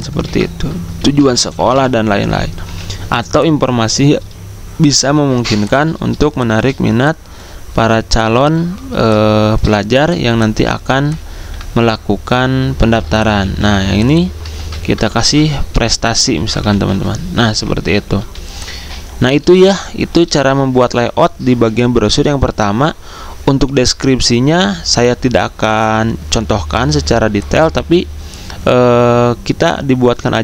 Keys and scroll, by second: 0.2 ctrl+a, 0.6-3.3 typing, 14.5 ctrl+a, 14.9-19.5 typing, 17.5 Escape.